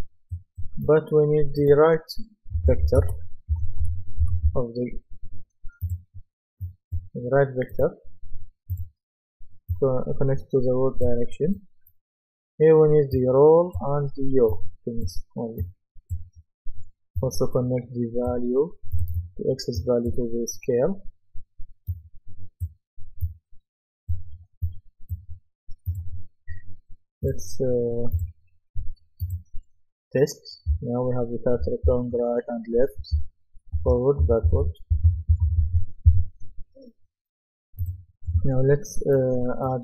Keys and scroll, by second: 2.3-5.0 typing, 30.7 d, 31.9 a, 33.2-36.1 typing, 36.1 Escape.